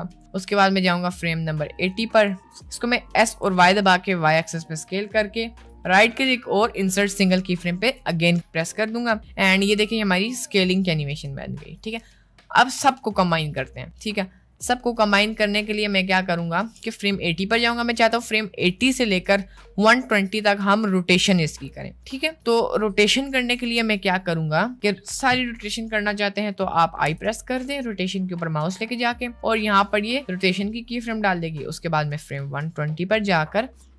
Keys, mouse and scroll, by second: 0.5-1.9 drag, 2.6 middle click, 3.3 s, 5.6-8.4 right drag, 9.5 space, 12.9 space, 13.3-18.2 drag, 27.1 i, 29.7-32.3 drag.